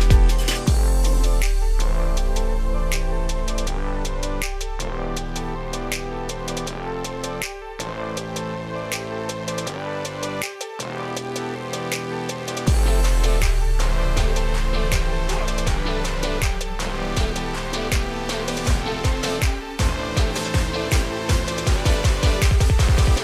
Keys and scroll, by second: 6.1 ctrl+g, 12.5 ctrl+space.